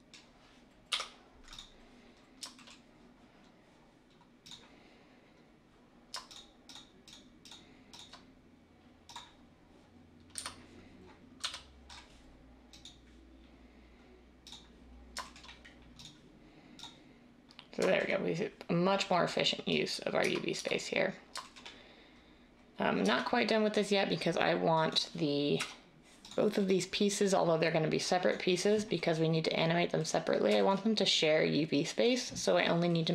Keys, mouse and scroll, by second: 0.8 u, 10.3 a, 11.3 a, 20.2 Tab, 20.5 Tab, 23.0 Tab, 25.5 \.